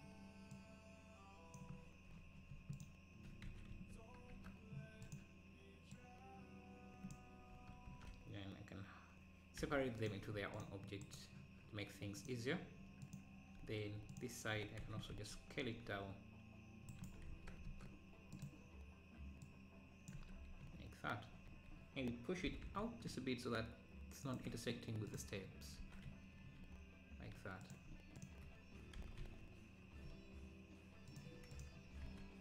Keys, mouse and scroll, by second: 0.6 click, 2.8 alt+click, 3.5 s, 6.0-7.9 drag, 7.9 ctrl+l, 9.6 p, 10.3 Tab, 10.6 click, 11.1-12.2 right drag, 12.2-13.6 drag, 13.6 Tab, 14.1 alt+click, 14.9 s, 17.1 s, 19.4 click, 20.2 Tab, 22.5 g, 25.1 click, 25.5-25.8 scroll down 4, 25.8 ctrl+s, 26.4 scroll up 4, 27.7-29.0 drag, 29.1 g, 31.5 click, 32.1 ctrl+s.